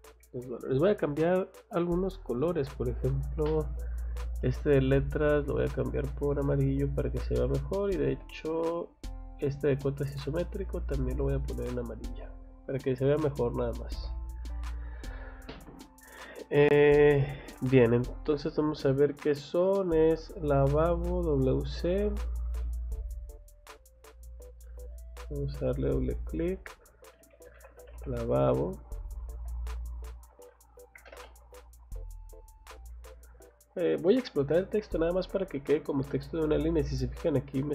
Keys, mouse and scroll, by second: 0.2 Escape, 1.7 click, 4.1 click, 5.2 click, 6.3 click, 7.1 click, 9.5 click, 10.1 click, 11.5 click, 12.0 click, 13.2 click, 13.7 scroll down 1, 13.9 Escape, 14.4 scroll up 2, 17.0 scroll up 2, 17.8 scroll down 2, 18.2 middle click, 18.7 scroll up 2, 19.3 middle click, 21.5 scroll down 1, 22.6 middle click, 24.0 click, 24.2 click, 24.9 click, 25.1 click, 26.0 click, 27.5 v, 27.9 o, 29.0 click, 29.5 Escape, 29.9 click, 30.1 click, 31.0 m, 31.1 space, 31.2 middle click, 31.7 click, 32.6 click, 32.9 Escape, 33.3 click, 36.5 click, 37.1 click.